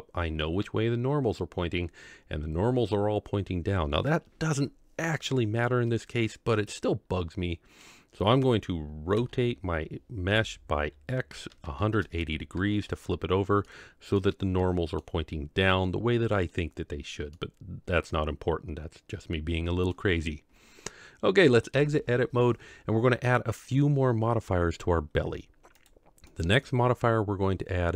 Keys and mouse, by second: 5.6-7.8 middle drag, 9.1 r, 13.6 middle click, 14.6 middle click, 17.3-19.9 middle drag, 21.7 Tab, 26.3-27.9 drag.